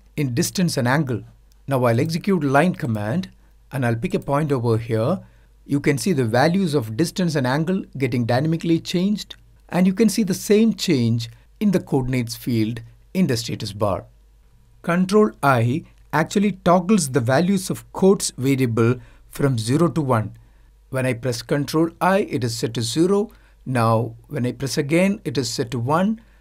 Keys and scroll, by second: 15.1 ctrl+i.